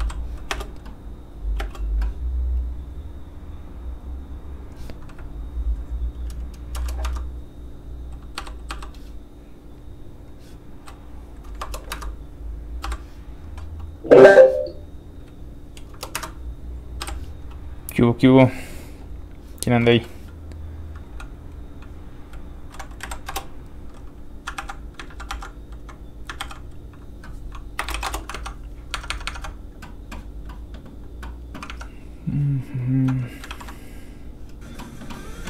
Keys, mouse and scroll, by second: 0.5 space, 2.6 click, 2.6 space, 6.7 KP_0, 7.0 Return, 8.4 i, 9.7 click, 11.6 KP_0, 11.9 Return, 12.8 i, 13.9 click, 15.9 click, 15.9 KP_0, 16.1 Return, 17.0 i, 17.8 click, 19.8 click, 19.9 shift+middle click, 20.7 middle click, 20.8 click, 24.1 Return, 24.1 click, 24.6 ctrl+c, 25.1 ctrl+a, 25.3 ctrl+c, 25.5 click, 25.6 click, 26.4 ctrl+v, 27.8 BackSpace, 27.9 shift+e, 28.0 shift+Return, 28.3 alt+Tab, 32.8 alt+click, 33.5 ctrl+alt+w, 34.2 click.